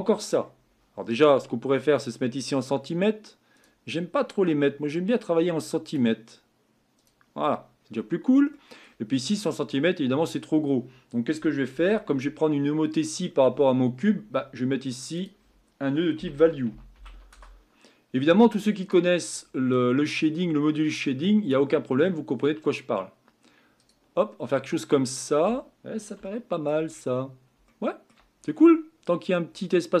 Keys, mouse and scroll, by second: 7.1-17.3 drag, 21.5-24.9 drag, 24.9-26.2 scroll up 5, 26.2-26.9 shift+middle drag, 26.9-27.3 scroll up 4, 27.7 shift+middle click, 28.3-29.0 scroll up 3, 29.0-30.0 scroll up 6.